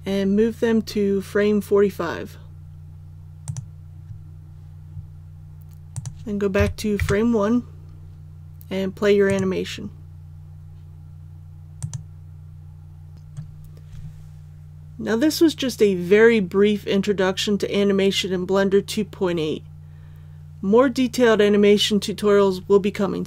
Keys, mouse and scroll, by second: 3.4 click, 6.5 KP_1, 9.2 click.